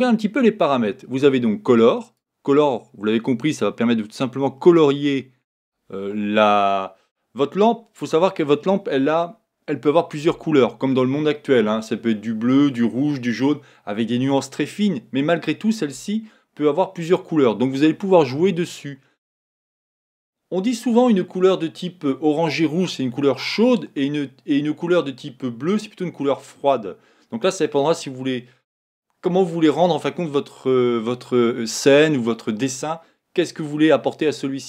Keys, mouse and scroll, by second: 2.2 click.